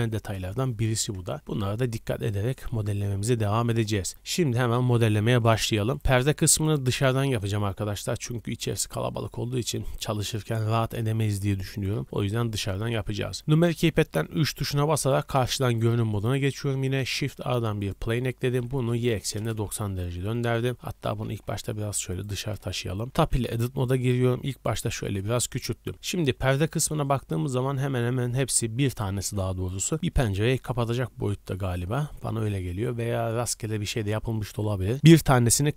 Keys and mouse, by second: 1.3 KP_0, 3.6-4.5 shift+drag, 4.6-6.7 drag, 6.7-8.5 middle drag, 8.5-9.6 drag, 9.6 middle drag, 9.7 drag, 9.9 middle click, 10.0-11.1 drag, 11.1-14.7 shift+middle drag, 13.5 KP_3, 15.1 middle click, 15.2-15.6 shift+drag, 15.6-16.0 shift+middle drag, 15.7 click, 17.0 shift+a, 18.6 shift+a, 18.6 r, 20.9 g, 21.5 click, 22.7 middle click, 22.7 KP_3, 23.0 Tab, 23.5 click, 23.7 s, 24.6 click.